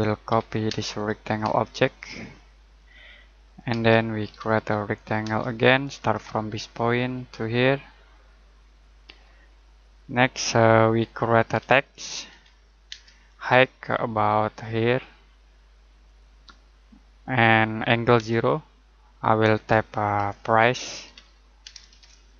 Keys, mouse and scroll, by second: 0.0-1.4 typing, 0.9 click, 2.0 click, 3.7-5.2 typing, 5.9 click, 9.0 click, 9.5 middle click, 10.1 scroll up 1, 10.7 middle click, 11.2-12.9 typing, 13.2 scroll up 1, 14.1 click, 18.1 space, 19.9-21.6 typing.